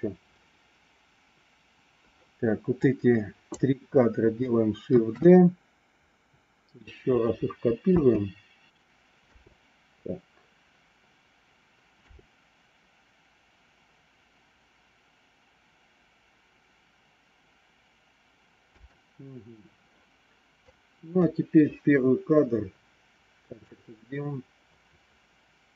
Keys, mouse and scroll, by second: 2.7 click, 5.0 shift+d, 7.9 space, 9.1 space, 12.0 space, 18.7 space, 20.6 click, 23.6-25.7 drag.